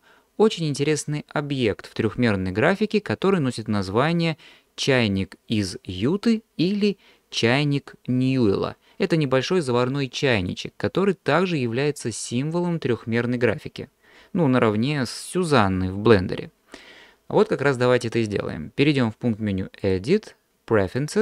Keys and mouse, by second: 19.8-21.2 drag.